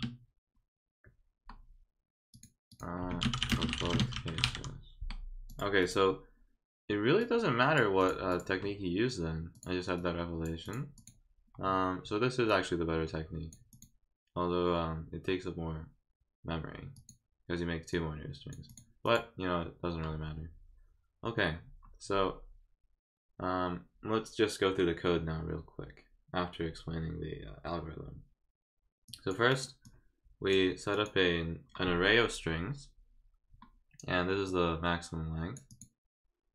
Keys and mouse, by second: 2.3 click, 2.7 click, 3.1-4.4 typing, 5.5 click, 5.8 click, 7.2 click, 8.0 click, 8.3 click, 9.5 click, 10.0 click, 10.6 click, 10.9 click, 12.5-13.5 drag, 13.7 click, 16.9 click, 17.9 click, 18.7 click, 19.0 click, 29.1 click, 29.5 click, 29.8 click, 30.9 click, 34.4-35.5 drag, 35.7 click.